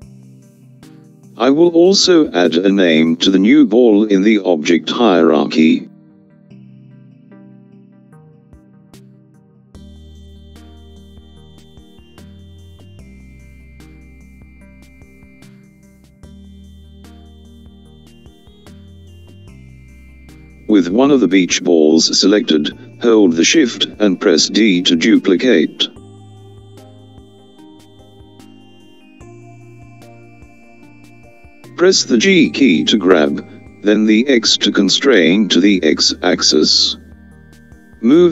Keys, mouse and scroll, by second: 7.2 click, 7.6-11.4 drag, 12.7 BackSpace, 24.0 click, 30.5 shift+d.